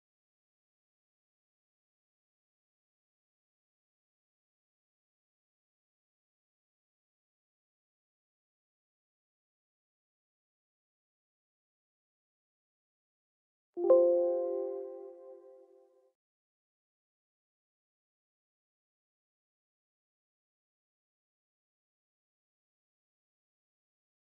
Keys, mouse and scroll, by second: 3.5 click, 7.0 click.